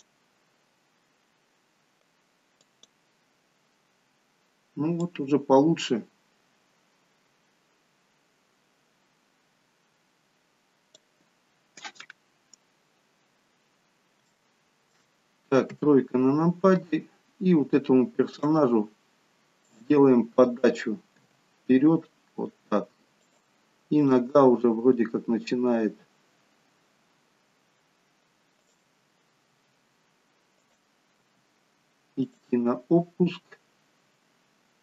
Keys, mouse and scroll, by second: 11.4-12.0 scroll up 2, 13.4-13.8 scroll down 1, 13.8 scroll down 1, 14.2 shift+middle click, 15.7 KP_3, 18.3 click, 21.0 click, 21.1 g, 24.0 click, 24.3 g, 29.5 r, 31.2 g.